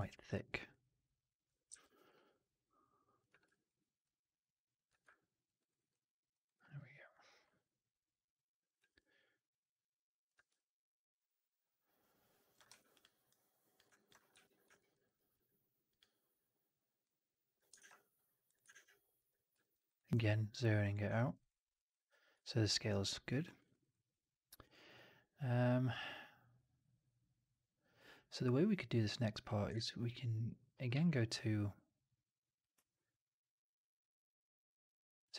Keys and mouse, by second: 1.6 ctrl+z, 3.2 w, 3.5 alt+click, 4.6 click, 4.8 f, 5.0-5.3 alt+drag, 5.5 alt+right drag, 5.6 alt+right drag, 5.8-6.2 alt+drag, 6.3 right drag, 6.5 right drag, 6.7 alt+click, 10.2 w, 10.4-12.4 alt+drag, 12.6 3, 13.8 alt+click, 14.2 4, 14.7 alt+middle click, 14.9 alt+right click, 15.8 click, 17.2 click, 17.7 shift+Tab, 18.6 shift+Tab, 19.5 alt+middle drag, 19.7 alt+right drag, 19.8 alt+right click, 20.5 click, 21.0 alt+middle click, 21.3 right click, 22.8 alt+right click, 23.3 alt+middle click, 23.5 alt+right click, 23.7 alt+right click, 29.6 shift+Tab, 30.8 q.